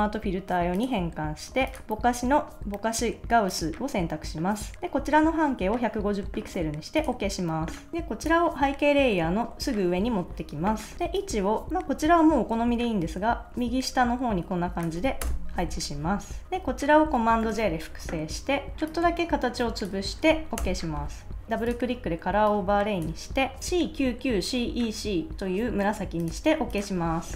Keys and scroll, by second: 4.7 0, 15.2 Return, 17.4 super+j, 20.6 Return.